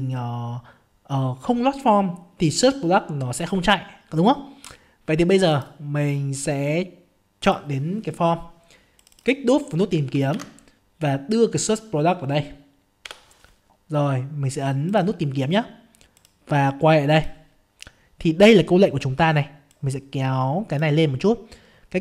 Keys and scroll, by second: 10.4 ctrl+v, 13.0 F5.